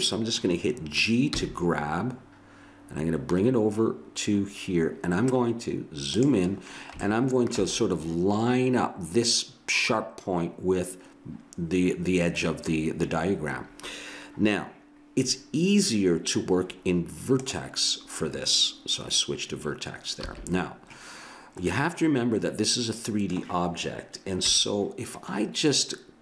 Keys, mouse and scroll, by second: 1.3 g, 6.5 scroll up 1, 7.0 middle click, 17.4-19.2 drag, 20.2 a, 24.4 KP_1.